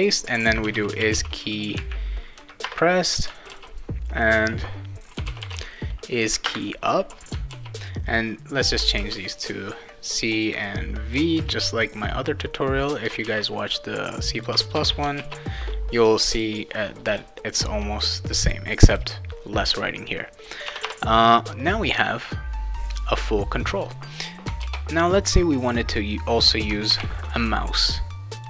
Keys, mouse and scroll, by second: 0.4-1.6 typing, 2.6 Return, 3.5 ctrl+s, 4.2 click, 4.4 click, 4.9-6.0 typing, 6.4 Return, 7.5 ctrl+s, 8.2 click, 9.0 shift+c, 10.3 click, 11.3 shift+v, 12.4 click, 13.2 shift+c, 14.1 click, 14.7 shift+v, 15.1 ctrl+s, 16.3 click, 18.0 click, 18.9 click, 20.7 Return, 20.8 Return, 24.6 ctrl+s, 26.9 ctrl+v, 28.4 click.